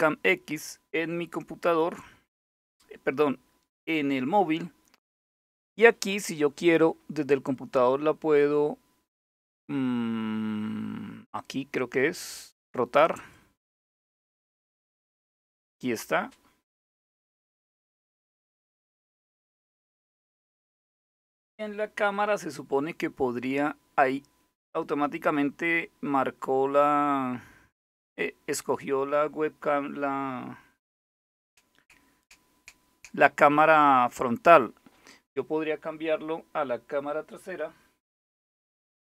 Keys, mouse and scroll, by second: 12.8 click, 14.0 click.